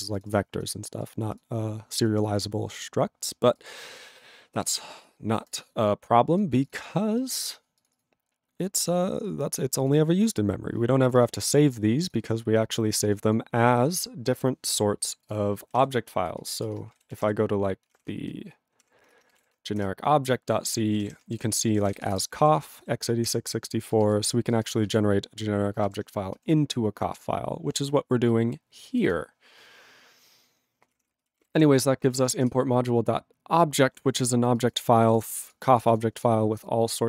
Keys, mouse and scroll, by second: 15.3 click, 20.2 ctrl+Return, 20.8-22.7 typing, 23.4 ctrl+l, 24.6 ctrl+space, 25.0 ctrl+alt+f, 25.9 ctrl+g.